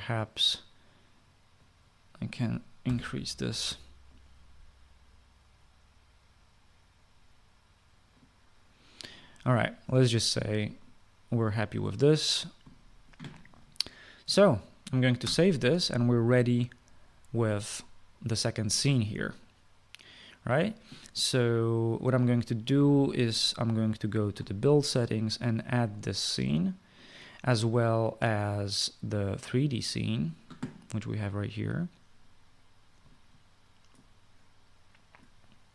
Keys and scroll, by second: 3.5 7, 15.9 ctrl+s.